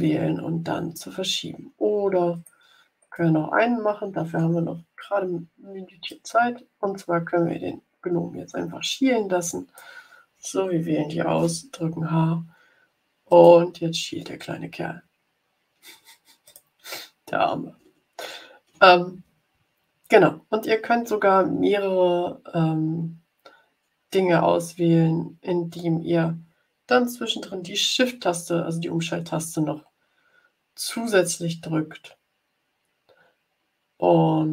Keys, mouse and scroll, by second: 1.6-2.1 ctrl+scroll up 2, 2.3 click, 2.9 click, 6.0-9.9 alt+drag, 11.3 h, 13.2 click, 14.6-15.4 ctrl+scroll down 2, 16.4 click, 17.8-18.3 ctrl+scroll down 4.